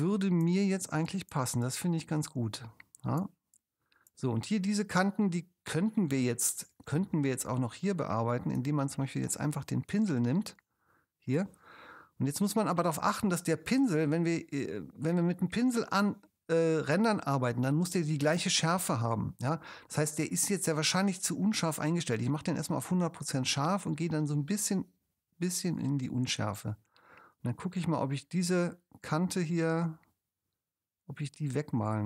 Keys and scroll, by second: 7.4 super+space.